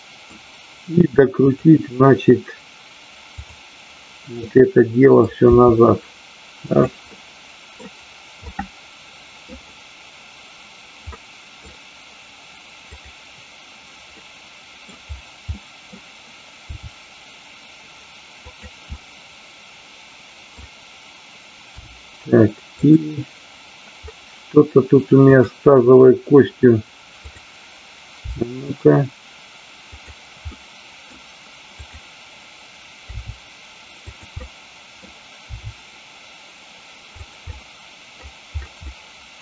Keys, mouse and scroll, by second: 4.4-5.1 middle drag, 5.5 r, 6.6 click, 7.0-7.8 middle drag, 8.4-9.4 middle drag, 11.1-11.5 middle drag, 12.9 click, 14.2-14.8 middle drag, 15.5 middle click, 16.6 r, 18.9-20.7 middle drag, 22.8 click, 25.1 click, 27.2 click, 29.9 click, 30.5 middle click, 31.7 click, 33.2 r, 34.4 middle click, 37.3 click, 37.5 middle click, 38.7 middle click.